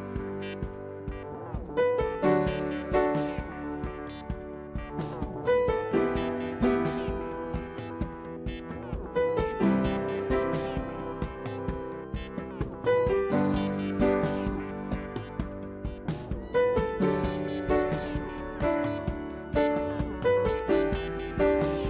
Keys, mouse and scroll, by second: 1.9 ctrl+d, 7.6-8.0 alt+shift+scroll up 1, 8.0 alt+shift+scroll, 8.0 space.